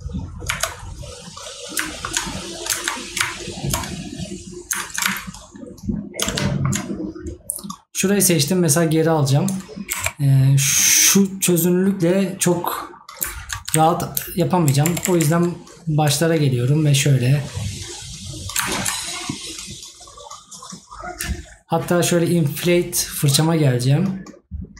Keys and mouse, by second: 1.9 right click, 6.5 right click.